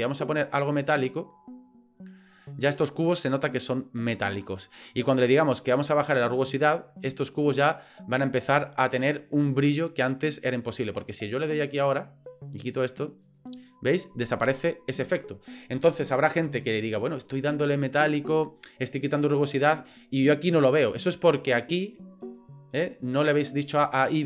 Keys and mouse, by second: 0.1-2.4 drag, 5.5-7.8 drag, 11.8 click, 13.2 click, 16.4 click, 22.4 drag, 23.8 click.